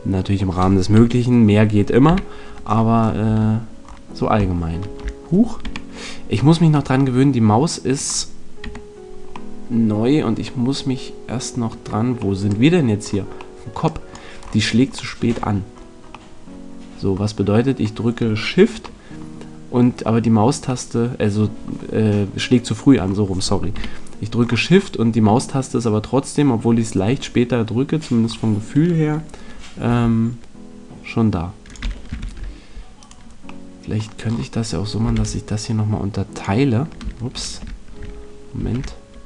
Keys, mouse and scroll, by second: 0.9 KP_3, 2.0 KP_5, 3.2 Tab, 3.2-4.6 middle drag, 5.6 KP_Decimal, 8.6 KP_Decimal, 9.5 middle click, 20.8 middle click, 23.7 KP_3, 28.2-31.6 middle drag, 29.8 g, 31.7 click, 32.1 ctrl+r, 33.4 click, 34.2 right click, 35.1 ctrl+r.